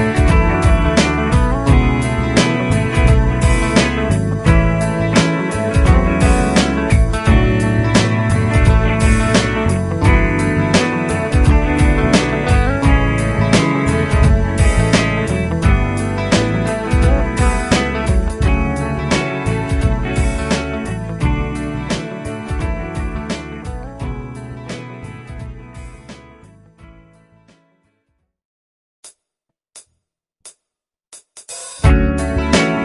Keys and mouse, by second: 0.5 |, 7.0 |, 22.6 double click.